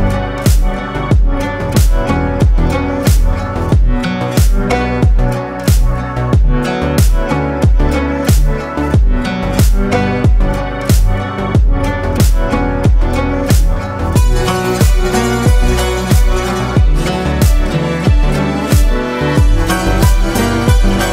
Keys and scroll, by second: 9.5 ctrl+g.